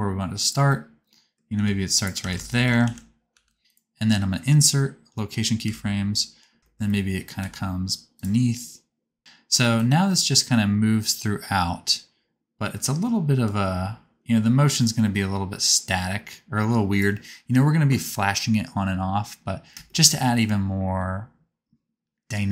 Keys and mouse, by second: 0.5-2.7 middle drag, 1.6 g, 2.2 alt+z, 2.9 alt+z, 3.4 g, 5.6 i, 6.6 shift+click, 7.3 g, 9.2 i, 9.7-16.1 drag, 16.1-20.7 middle drag.